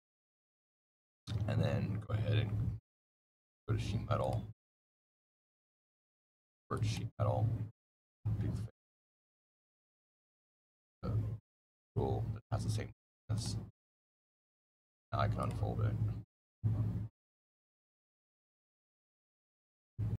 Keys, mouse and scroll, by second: 0.0 middle click, 0.7 click, 4.1 right click, 4.9 click, 6.6 right click, 7.9 click, 13.2 right click, 14.6 click, 15.3 click, 16.1 click, 18.3 click, 20.1 click.